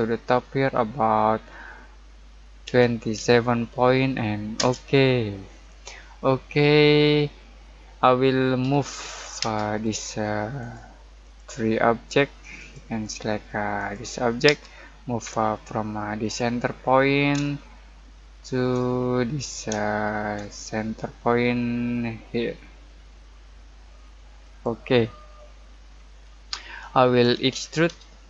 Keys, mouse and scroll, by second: 2.6-3.1 typing, 4.5 Return, 5.6 middle click, 6.4 scroll down 1, 6.7-8.6 middle drag, 8.6 m, 9.4 space, 9.8 click, 14.4 space, 16.2 click, 16.7 scroll down 1, 16.9 middle click, 18.8-19.7 scroll up 1, 19.7-23.2 shift+middle drag, 24.4 click, 25.2 scroll down 1, 25.4 middle click, 25.9-27.2 scroll up 1, 27.0-28.2 typing.